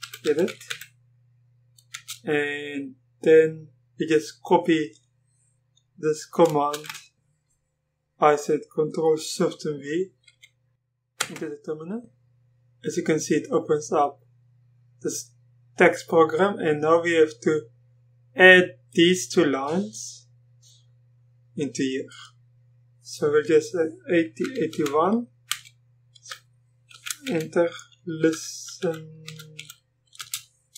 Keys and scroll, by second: 0.2-2.8 typing, 6.7 ctrl+v, 7.1 typing, 11.2 Return, 24.4-30.2 typing.